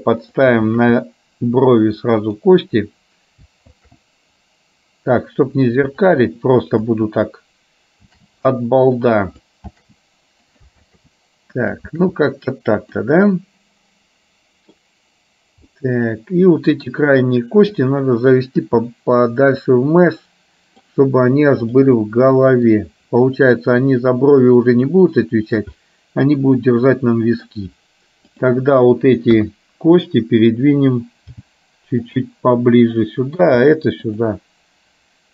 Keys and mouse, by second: 0.8 shift+d, 3.8 shift+d, 8.2 shift+d, 9.8 shift+d, 10.9 shift+d, 11.9 shift+d, 13.3-14.8 middle drag, 15.8-16.8 middle drag, 17.8 click, 18.9-20.9 middle drag, 21.9 click, 22.2 middle click, 24.6-25.7 drag, 25.8-27.6 middle drag, 28.4 click, 29.6 KP_1, 31.4 g, 32.8 click, 33.6 g.